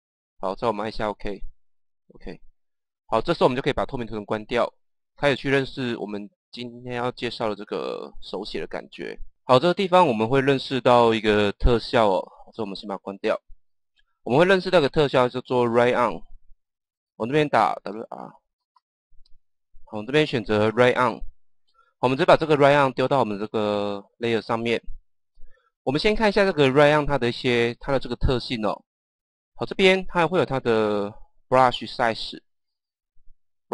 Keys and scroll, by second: 17.5-19.2 typing.